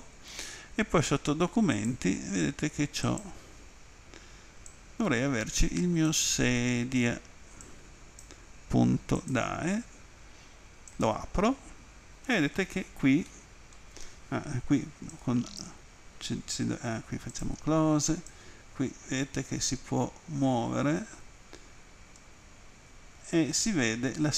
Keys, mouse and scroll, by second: 1.8 click, 3.1 click, 7.7 click, 9.2 click, 9.3 click, 10.9 click, 13.3 middle click, 15.1 alt+click, 17.3 click, 18.3 click.